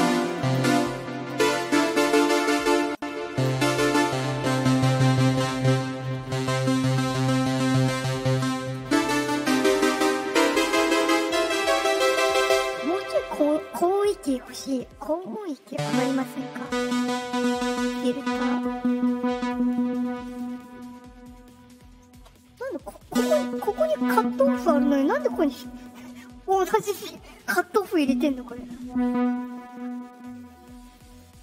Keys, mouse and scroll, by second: 17.9-20.3 drag, 22.7-24.7 drag, 27.6-29.4 drag.